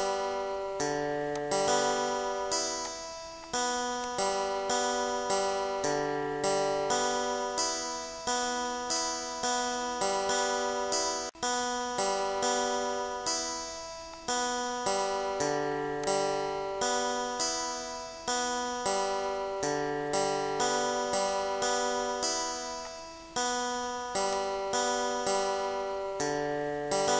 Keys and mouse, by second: 0.3 click, 3.8 click, 4.8 click, 6.2 click, 6.8 2, 7.1 5, 7.3 click, 8.3-10.0 typing, 8.7 click, 10.6 click, 11.7 click, 12.5 click, 13.6 click, 14.4 click, 15.5 click, 16.0 click, 16.6 click, 18.0 click, 18.6 click, 20.4 click, 22.4 click, 23.7 click, 24.8 click.